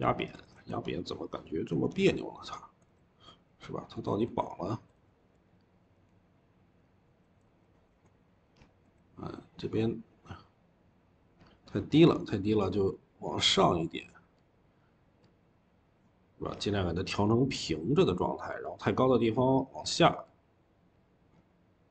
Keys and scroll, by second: 0.0-0.9 typing, 7.7-8.7 typing.